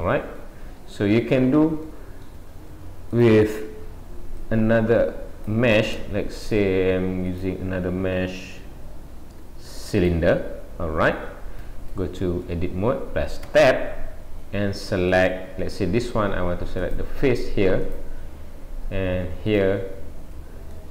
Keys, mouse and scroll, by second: 0.4 middle click, 1.9 middle click, 3.2 click, 4.4 click, 6.4 shift+a, 10.9-11.4 scroll up 4, 13.4 scroll up 1, 13.5 Tab, 15.1 click, 16.8 click, 19.5 shift+click, 20.1 shift+click, 20.7 middle click.